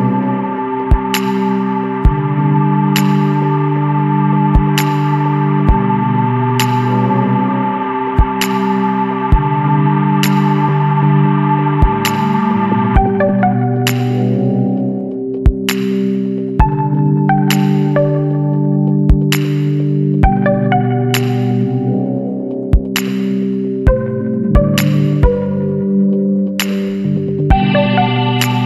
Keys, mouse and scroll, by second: 2.7 click, 4.5 click, 6.2 click, 7.6 scroll down 1, 8.2 scroll up 1, 9.3-10.3 middle drag, 9.5-11.9 drag, 12.2 scroll down 1, 12.8 scroll up 1, 14.4 click, 16.1 click, 17.1 click, 19.2 click, 21.3 click, 24.0 click, 25.0 click, 27.7 click.